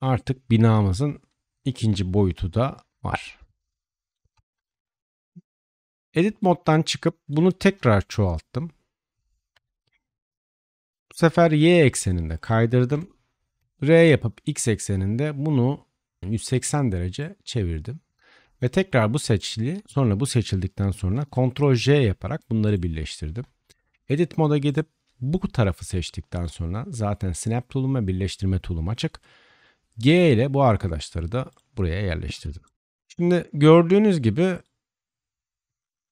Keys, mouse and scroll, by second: 4.2 Tab, 4.7 middle click, 4.7 right click, 5.4 Tab, 7.1-12.3 shift+middle drag, 7.6 shift+d, 12.3-19.9 right drag, 12.8 r, 17.2-19.4 drag, 19.9 click, 20.9-23.2 ctrl+right drag, 21.7 ctrl+j, 23.2 Tab, 23.2-32.2 drag, 23.7 right click, 24.7 right click, 26.0 right click, 30.0 g, 32.2 Tab, 32.7 click, 33.1-36.1 drag.